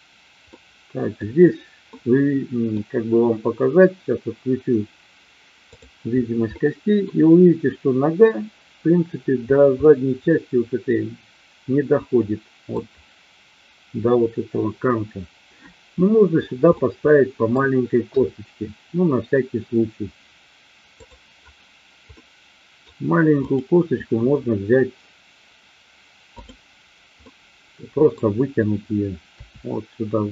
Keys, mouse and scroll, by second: 0.5 middle click, 1.9 middle click, 5.6 click, 6.5 middle click, 9.8-12.6 middle drag, 16.6 middle click, 18.1 KP_3, 21.0 click, 22.1 middle click, 23.4 click, 26.4 click, 27.1-28.1 middle drag, 29.3 e.